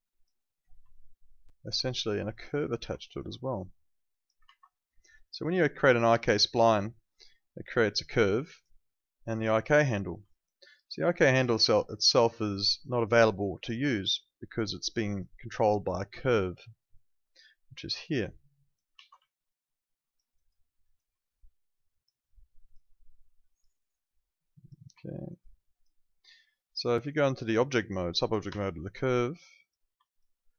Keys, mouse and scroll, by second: 0.9 alt+click, 3.0 alt+click, 4.4 ctrl+z, 5.2 click, 8.0 click, 10.2 alt+click, 11.9 alt+click, 12.7 alt+middle click, 12.9 alt+right click, 13.2 alt+click, 16.3 alt+middle click, 16.6 alt+right click, 17.3 click, 18.9 ctrl+z, 19.2 alt+click, 20.6 alt+middle click, 20.8 alt+right click, 21.7 click, 25.0 alt+middle click, 25.3 alt+right click, 25.5 alt+click, 26.8 alt+middle click, 27.1 alt+right click, 27.3 alt+click, 28.5 F9, 29.1 click, 30.0 alt+click.